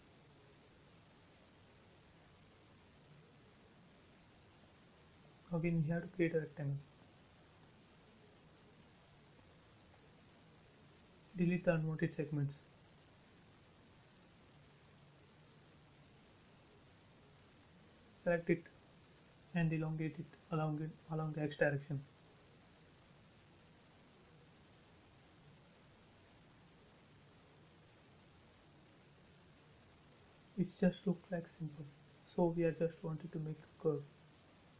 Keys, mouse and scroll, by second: 0.3-1.0 typing, 2.2 2, 2.4 Return, 2.8 space, 5.5 l, 6.0 click, 6.9 click, 7.0-7.8 typing, 8.1 click, 8.2 click, 9.6 scroll up 1, 9.9 click, 12.3 space, 12.9 shift+middle click, 13.7 e, 14.0 click, 14.9 space, 15.4 click, 16.1 Delete, 16.8 click, 17.3-17.6 scroll down 1, 18.5 shift+middle click, 18.7 shift+scroll up 1, 18.8-19.5 scroll down 1, 19.5 middle click, 20.2 scroll down 1, 22.3 m, 22.9 click, 24.1 Right, 25.7-26.0 scroll down 1, 28.4 space, 28.7-29.0 scroll up 1, 30.7 a, 31.5 click, 32.7 Escape, 33.6 click, 33.8-34.7 scroll down 1.